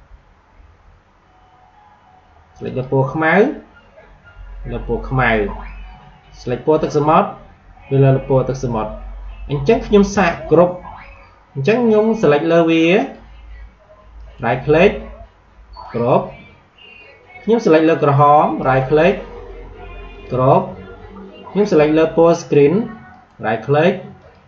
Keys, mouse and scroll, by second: 2.6 click, 6.7 click, 10.5 click, 12.9 click, 14.1 right click, 15.7 click, 18.5 right click, 20.1 click, 23.0 right click, 24.1 click.